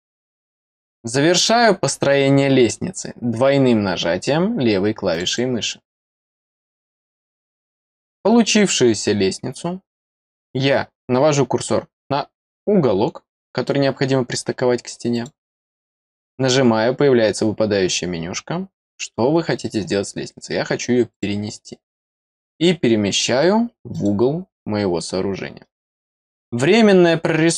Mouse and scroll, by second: 5.0 click, 5.2 click, 11.0-12.1 middle drag, 15.1 click, 21.0 click, 23.8 click, 25.5 scroll down 1, 25.9 middle click.